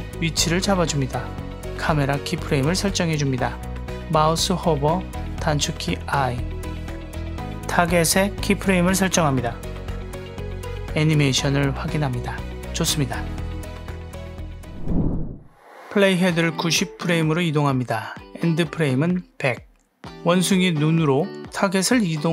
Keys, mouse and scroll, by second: 0.0-2.3 drag, 7.2 click, 10.7 click, 13.1 click, 15.5 space, 16.3 click, 17.7 shift+middle click, 18.5 click, 18.9 KP_0, 20.2 click, 20.8 click, 21.9 click.